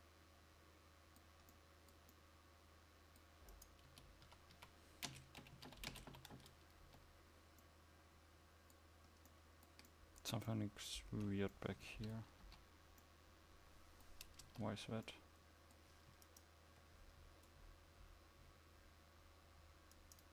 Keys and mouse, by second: 4.0 Tab, 4.4 a, 5.2 space, 7.0 Tab, 12.5 KP_5, 14.6 Tab.